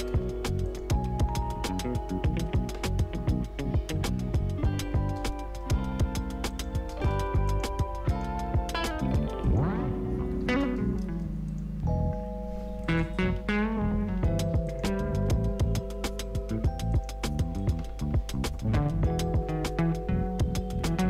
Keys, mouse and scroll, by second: 5.4 Return, 6.5 click, 11.0 Return, 11.4 click, 11.8-12.8 scroll up 1, 12.8 click, 13.3 ctrl+d, 14.6 shift+click, 15.4 r, 16.9 click, 19.5 Right.